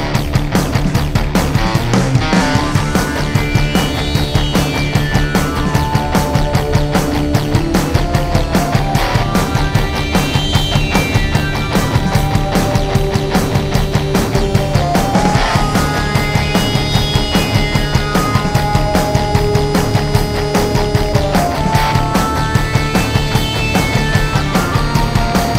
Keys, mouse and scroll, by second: 2.2-7.7 drag, 8.2 click, 13.7 click, 15.5-18.6 drag, 22.1 click.